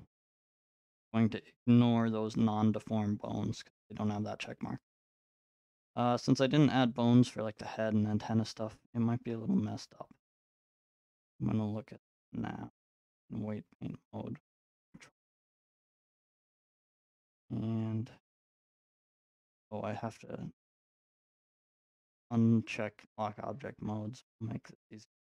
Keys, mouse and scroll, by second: 0.0-6.1 drag, 6.1-11.6 middle drag, 12.4-14.7 drag, 14.2 ctrl+Tab, 14.7 ctrl+Tab, 16.1-20.4 middle drag, 20.8-25.3 drag, 24.5 ctrl+Tab.